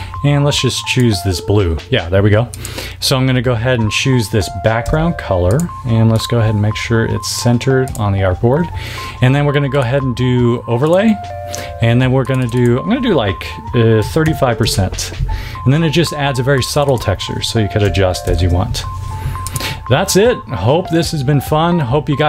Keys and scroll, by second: 4.8 v, 13.9 3, 14.2 5, 14.5 Tab, 17.8 4, 18.2 0, 18.3 Tab.